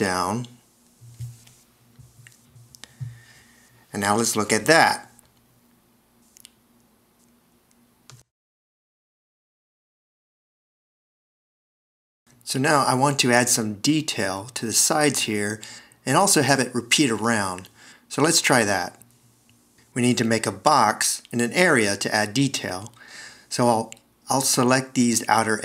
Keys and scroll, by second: 6.0 t, 8.9 c, 12.0 shift+s, 20.9 Return, 23.2 v.